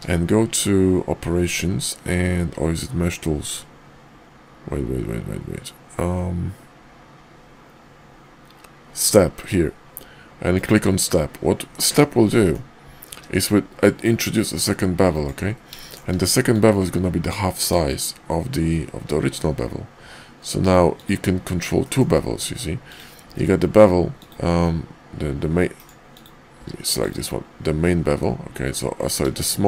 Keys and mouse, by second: 12.2-12.5 drag, 13.1 ctrl+`, 15.8 shift+drag, 16.5-21.1 drag, 21.8 shift+drag, 22.8 click, 23.2 q, 26.1 click, 26.5 q.